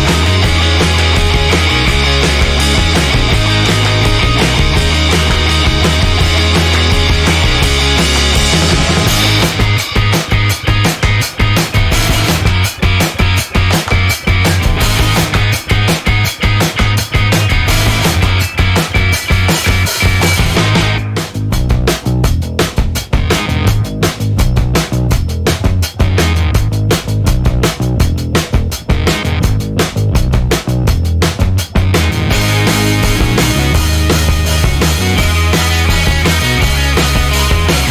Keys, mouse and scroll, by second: 0.6-2.9 drag, 11.2-11.7 scroll down 2, 12.7-14.1 drag, 14.3 1, 15.4 scroll down 2, 16.5 scroll up 2, 17.4 scroll up 2, 18.3 scroll down 2, 19.4 2, 21.2 3, 22.2 4, 24.3 5, 25.3 6, 26.7 0, 30.0 scroll down 2, 30.6-31.6 scroll up 3, 32.1 scroll down 1, 33.1 1, 35.0 click, 36.2 click, 37.6 click.